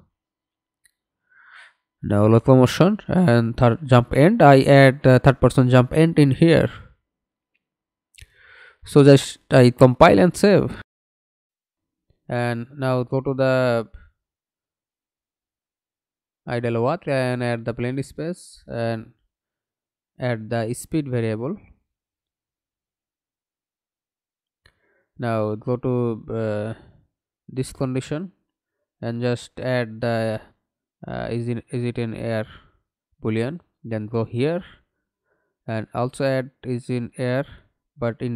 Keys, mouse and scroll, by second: 11.5 right click, 12.9 double click, 13.5 right click, 14.0-14.6 scroll up 1, 22.3 double click, 26.3 right click, 27.6 double click, 34.5 double click, 34.6 right click, 35.9 double click.